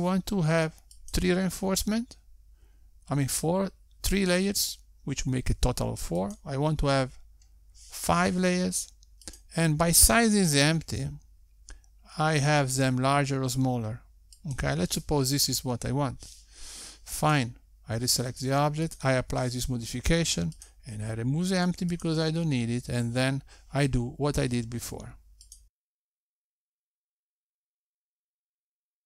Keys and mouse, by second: 1.7 click, 4.0 click, 9.0 click, 12.3 click, 13.3 s, 20.4 click, 22.0 click, 23.7 click, 24.2 shift+super+z, 25.5 Tab, 25.6 Tab, 25.8 click, 26.2 click, 27.7 click, 28.6 click.